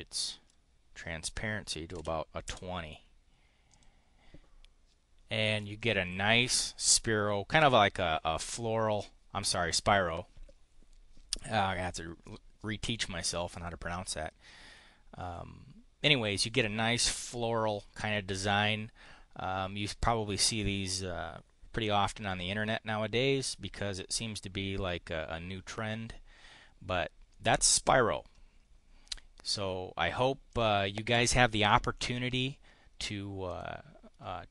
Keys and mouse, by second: 1.6-2.5 typing, 3.7 click, 27.3-30.2 middle drag, 30.5 click, 33.4 click.